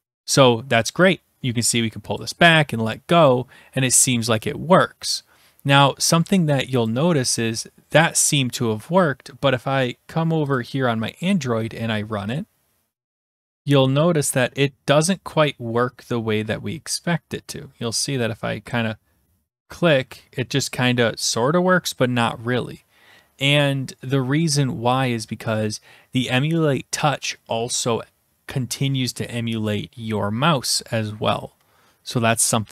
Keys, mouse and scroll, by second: 0.1 click, 2.1 click, 6.9 click, 10.5-11.3 drag.